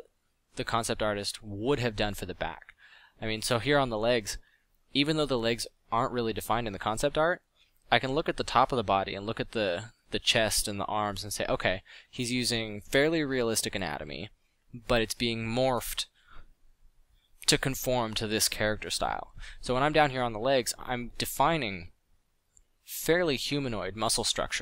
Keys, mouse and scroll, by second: 1.9-3.3 drag, 3.9 f, 14.8 f, 15.3 f, 16.1 f, 17.2 f, 22.5 f, 22.8 f.